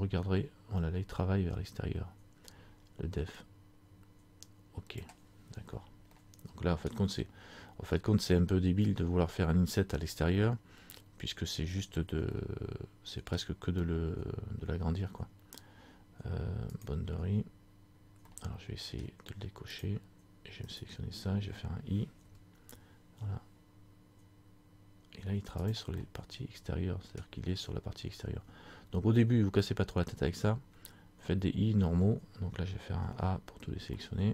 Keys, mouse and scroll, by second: 6.3 middle click, 12.4 scroll up 1, 12.4 middle click, 13.6 scroll down 1, 16.9 click, 17.9-18.4 scroll down 2, 18.4 scroll up 1, 18.5 middle click, 19.2-19.7 scroll down 1, 20.0 click, 20.9 right click, 22.4 i, 26.0 scroll up 1, 26.2 middle click, 27.4-28.4 scroll down 1, 34.2 middle click, 34.2 scroll up 1.